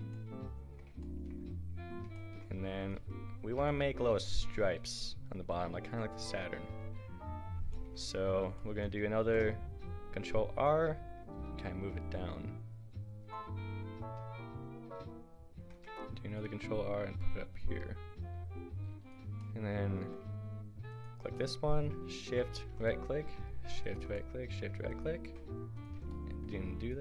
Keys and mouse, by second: 2.8 click, 3.0 Tab, 3.3-5.8 right drag, 4.6 a, 9.2 ctrl+r, 11.2-12.4 middle drag, 15.6 ctrl+r, 19.0-24.3 drag, 24.3-26.2 middle drag, 26.2 right click, 26.2 middle click, 26.4-27.0 right drag.